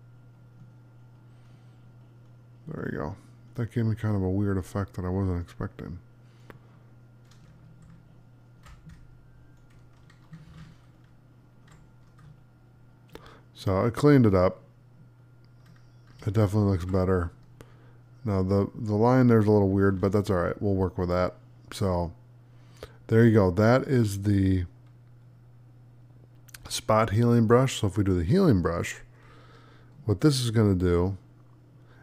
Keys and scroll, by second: 12.1 space, 16.3 alt+z, 17.1 space.